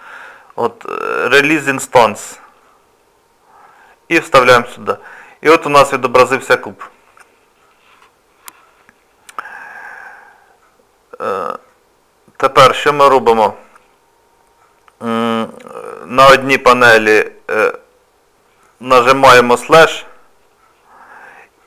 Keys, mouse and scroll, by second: 11.7 middle click, 13.3 click.